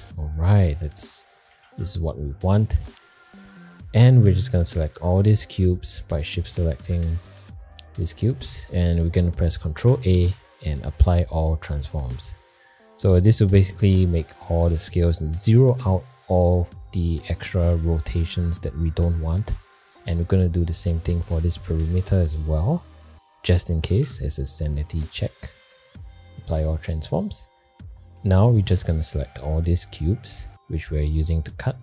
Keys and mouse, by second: 0.5 middle drag, 1.1 shift+middle drag, 1.8 alt+shift+z, 2.0 shift+middle click, 2.6 middle click, 3.0 shift+middle click, 4.4 drag, 4.9 click, 9.7 ctrl+a, 20.0 click, 24.1 ctrl+a, 27.1 click, 29.6 shift+click, 30.9 shift+click.